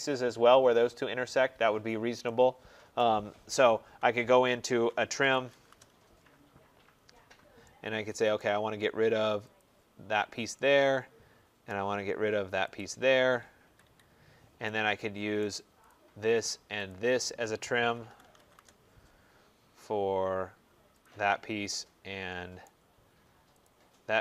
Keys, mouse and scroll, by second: 2.9 right click, 3.3 middle click, 3.4 middle click, 3.5 middle click, 4.9-5.9 typing, 7.1 middle click, 7.5 scroll, 7.5 typing, 8.3 right click, 9.5 click, 11.5 right click, 12.6 click, 13.5 Escape, 13.7 Escape, 15.3 right click, 15.8 click, 16.8 shift+click, 17.9-18.8 typing, 21.0 click, 22.5 right click, 23.5 click.